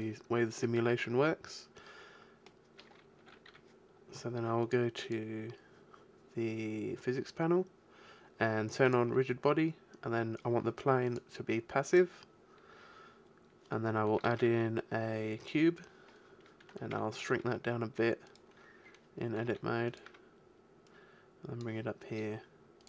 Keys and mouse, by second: 1.8-3.2 middle drag, 3.2 n, 3.5 t, 10.6 click, 10.8 middle click, 11.1-12.9 drag, 12.9-13.9 middle drag, 14.2 shift+a, 15.0-16.9 middle drag, 16.9 Tab, 17.3 s, 19.4 s, 20.0 Tab.